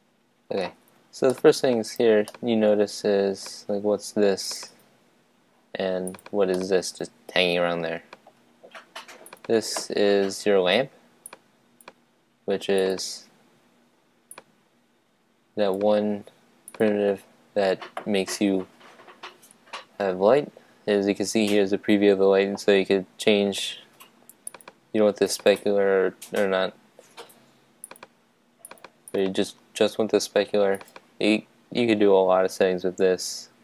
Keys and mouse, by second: 4.4-6.6 drag, 6.6-8.4 middle drag, 9.2-13.0 drag, 14.3 click, 15.2 click, 16.7-18.4 drag, 24.5-27.2 drag, 28.0-32.7 drag.